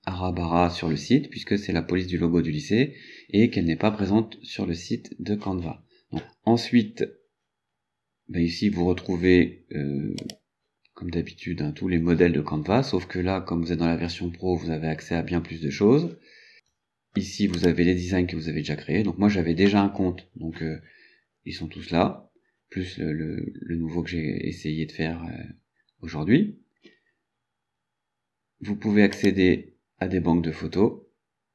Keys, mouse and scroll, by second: 10.3 click, 17.6 click, 29.2 click.